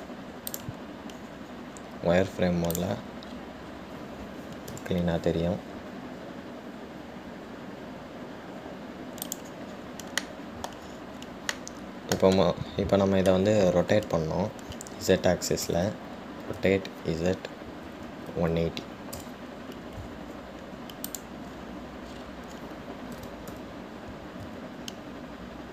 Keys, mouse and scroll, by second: 1.0 `, 4.1 click, 4.5-5.8 scroll up 3, 5.8 g, 10.9-11.4 scroll down 1, 11.4-12.1 middle drag, 12.1-12.7 scroll down 2, 12.7-15.7 middle drag, 22.2 click, 23.3-23.7 scroll up 4, 24.3 g.